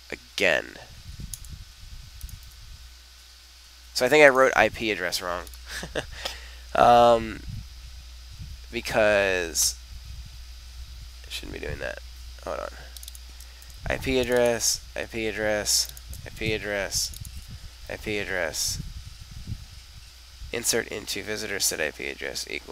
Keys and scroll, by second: 2.4 super+r, 13.6 super+c, 14.6 super+v, 16.4 super+c, 17.4 super+v.